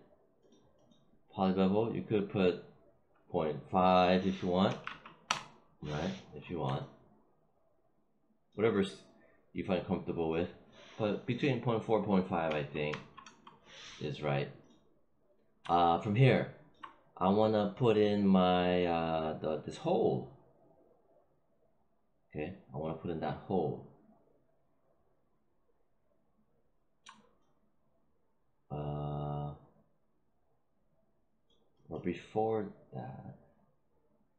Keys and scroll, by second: 4.6 ., 4.7 5, 5.2 Return, 12.4 ., 12.8 4, 13.1 Return.